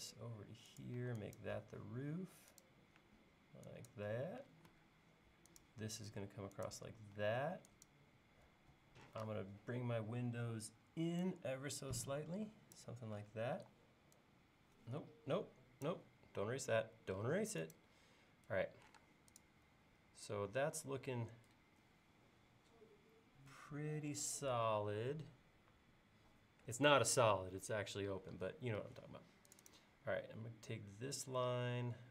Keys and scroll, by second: 1.0 e, 4.5 l, 7.2 e, 9.1 p, 13.6 e, 15.4 Escape, 19.0 space, 30.1 l.